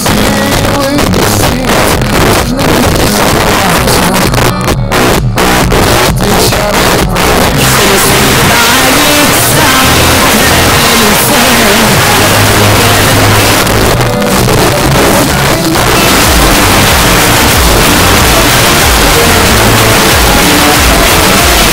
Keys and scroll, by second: 0.0 Down, 0.2 Down, 0.3 Down, 0.5 Down, 0.6 Down, 0.8 Down, 1.0 Down, 1.1 Down, 1.2 Down, 1.4 Down, 1.5 Down, 1.7 Down, 1.9 Down, 2.0 Down, 2.3 Down, 2.5 Down, 2.9 Down, 3.1 Down, 3.9 Up, 4.2 Return, 13.5 Page_Down.